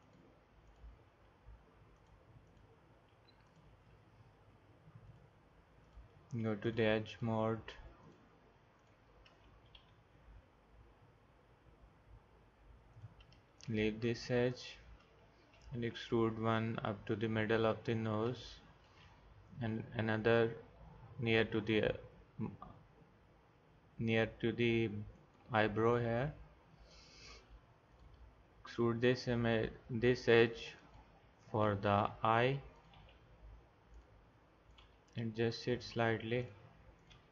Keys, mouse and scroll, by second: 1.1 g, 3.0 g, 9.8 e, 15.5 e, 19.5 e, 27.9 click, 28.4 e, 31.9 click, 33.0 g, 34.8 g, 37.1 g.